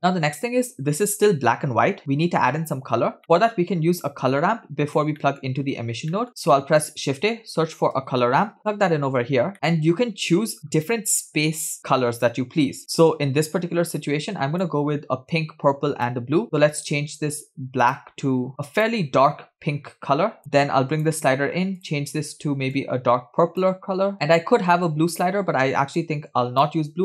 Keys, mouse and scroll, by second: 3.0-3.3 scroll down 2, 3.2 middle click, 4.0-5.0 drag, 5.2 middle click, 6.1 middle click, 6.3 click, 6.5 shift+a, 8.6 BackSpace, 9.5 click, 9.5 middle click, 12.8-14.0 scroll up 3, 14.0 scroll up 1, 14.0-14.8 drag, 15.3-16.3 drag, 16.4 click, 17.9 click, 20.4-21.2 drag, 21.9 click, 26.0 click.